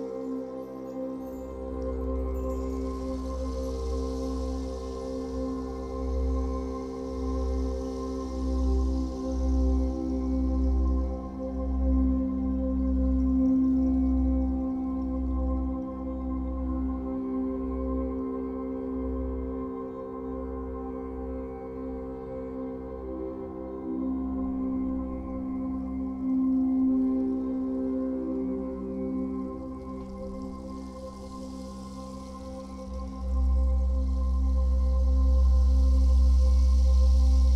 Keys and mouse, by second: 1.4 click, 3.3 click, 3.9 click, 6.0 Right, 6.2 Right, 6.7 Right, 8.4 alt+click, 10.4 click, 10.7 click, 12.7-13.8 drag, 15.0 i, 15.7-16.8 drag, 17.3 i, 18.7-22.3 drag, 22.9 Left, 24.2-27.0 drag, 28.2 i, 29.4 click, 30.1 space, 31.0 space, 32.0 ctrl+s, 32.8 ctrl+alt+click, 33.3 ctrl+alt+click, 34.4 click, 35.1 click, 35.5 click, 36.1 click, 37.0 click.